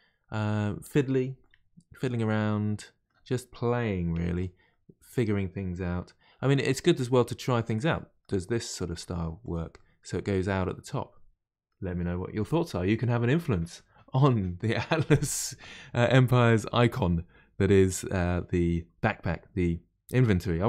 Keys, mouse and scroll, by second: 4.1 1, 4.3 click, 4.7-6.4 middle drag, 6.4 g, 7.9 middle click, 8.7 click, 8.9 g, 9.8-12.8 middle drag, 16.4-19.5 middle drag.